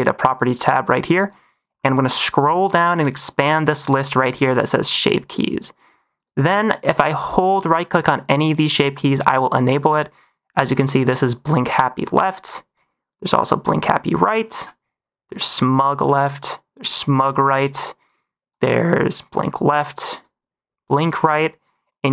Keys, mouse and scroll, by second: 2.8 click, 6.1 click, 7.2-10.5 drag, 12.4 drag, 13.7 click, 15.2 click, 16.7-18.0 drag, 18.4-18.7 drag, 19.2 click, 20.8-21.6 drag.